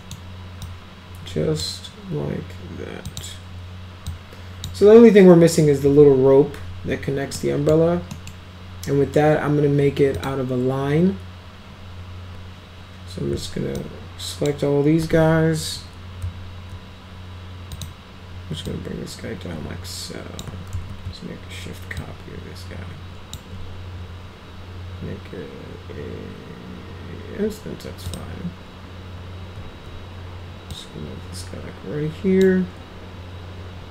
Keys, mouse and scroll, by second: 0.6-1.6 drag, 3.1 click, 4.1-4.6 drag, 7.3-7.7 middle drag, 8.1 middle click, 10.2 click, 13.8-14.5 ctrl+drag, 17.8 click, 18.6-20.4 drag, 20.7 ctrl+z, 22.0-23.3 shift+drag, 28.1 click, 30.7-32.4 drag.